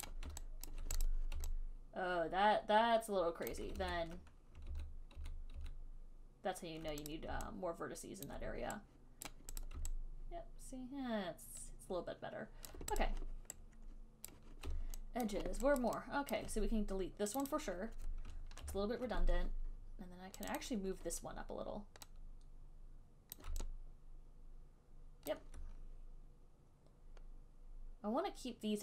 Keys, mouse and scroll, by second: 0.4 click, 1.0 alt+right click, 1.3 alt+click, 3.8 alt+click, 4.1 ctrl+z, 4.9 ctrl+z, 5.4 ctrl+z, 5.8 ctrl+z, 7.4 click, 8.5 alt+click, 9.6 right click, 10.0 click, 12.9 alt+click, 13.3 click, 14.7 right click, 15.5 alt+right click, 16.1 alt+right click, 16.6 alt+click, 17.6 click, 17.8 click, 17.8 alt+click, 18.9 ctrl+Delete, 20.8 click, 20.9 click, 23.7 click, 25.6 alt+click, 25.7 alt+click.